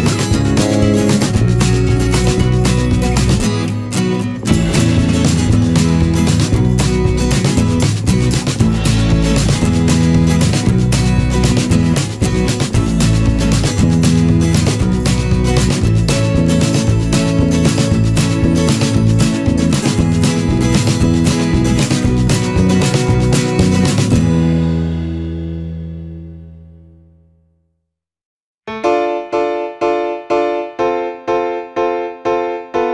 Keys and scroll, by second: 3.0 ctrl+-, 10.3 ctrl+-, 14.1 Return, 31.0 ctrl+-, 31.3 ctrl+0, 32.4 ctrl+z.